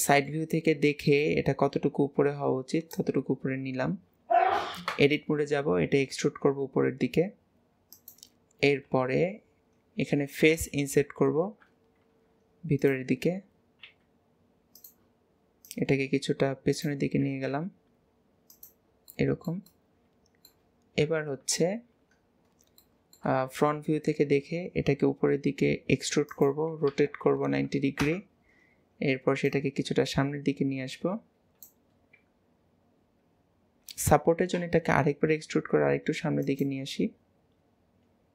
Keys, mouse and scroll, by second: 0.1-0.6 shift+middle drag, 0.6-1.2 scroll up 1, 1.2 click, 3.4-4.0 scroll up 7, 9.0 KP_7, 9.8 scroll down 1, 15.7 click, 19.1 middle click, 19.8-21.1 middle drag, 21.1 KP_1, 22.5-22.9 scroll down 1, 22.9-24.3 shift+middle drag, 24.3 e, 29.5 click, 32.1-34.6 scroll up 2, 34.6 e, 37.7-38.3 scroll down 2.